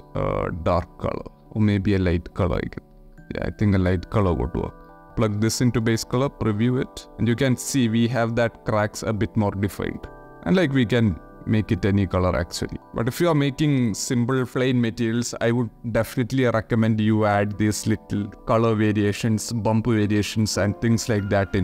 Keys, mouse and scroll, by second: 3.2 click, 4.3-4.9 drag, 5.2 ctrl+shift+middle click, 6.3 middle click, 9.7 middle click, 13.0 shift+middle click.